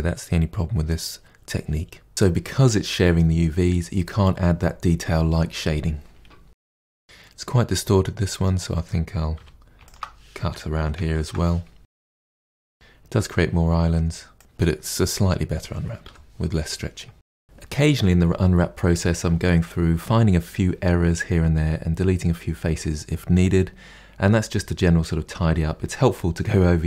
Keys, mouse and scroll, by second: 2.9 middle click, 2.9 Tab, 3.0 click, 3.1 shift+middle click, 3.4 Tab, 3.5 middle click, 4.0 3, 4.1 click, 4.3 ctrl+e, 4.5 2, 4.7 click, 4.9 alt+click, 5.1 ctrl+e, 5.3 KP_Divide, 5.4 middle click, 5.5 scroll down 2, 5.6 middle click, 5.9 3, 6.1 click, 6.3 ctrl+e, 6.4 a, 6.6 u, 6.9-9.3 middle drag, 9.3 2, 9.8 alt+click, 11.8 middle click, 11.8 a, 12.5 u, 14.4-16.0 drag, 16.0 KP_Divide, 17.1 middle click, 17.3 Tab, 17.4 middle click, 17.5 2, 17.7 alt+click, 18.1 a, 18.4 u, 19.2-19.5 scroll down 11, 19.5 shift+middle click, 20.2 Tab, 20.5 shift+middle click, 20.8 scroll down 1, 20.9 middle click, 21.3 click, 21.4 middle click, 21.6 Tab, 21.7 scroll up 4, 21.8 shift+middle click, 22.2 scroll down 1, 22.3 middle click, 23.3 Tab, 23.4-23.7 scroll down 7, 23.7 shift+middle click, 24.3 scroll up 2, 24.4-25.8 shift+middle drag, 25.8 click, 26.0 KP_Decimal, 26.1-26.8 middle drag, 26.8 scroll up 1.